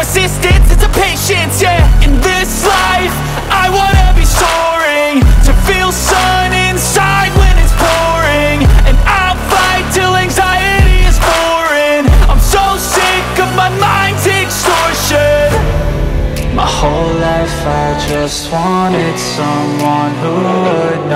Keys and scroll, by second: 1.0 F2, 5.2 F4, 5.9 Escape, 9.0 shift+F2, 9.5 shift+Page_Up, 10.2 F3, 15.2 F4, 16.3 Escape, 21.0 shift+F2.